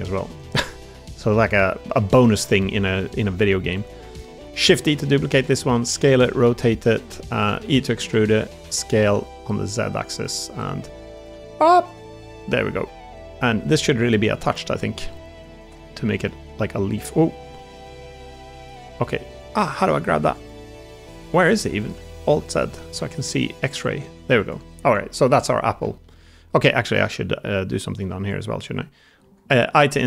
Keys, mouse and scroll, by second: 0.5 middle click, 1.0 3, 1.5 middle click, 2.0 middle click, 2.9 middle click, 3.9 middle click, 4.5 shift+d, 4.9 click, 5.2 s, 5.9 r, 7.6 e, 8.5 s, 10.1 z, 10.4 g, 11.2 r, 11.9 g, 12.7 click, 14.4 middle click, 14.6 click, 16.1 middle click, 16.4 g, 18.1 g, 19.2 click, 19.4 middle click, 21.5 middle click, 21.7 alt+z, 22.1 click, 22.4 middle click, 22.8 alt+z, 23.1 g, 24.7 Tab, 25.3-25.6 middle drag, 25.7 shift+middle drag, 26.0 middle click, 26.7 Tab, 27.6 middle click, 29.1 i.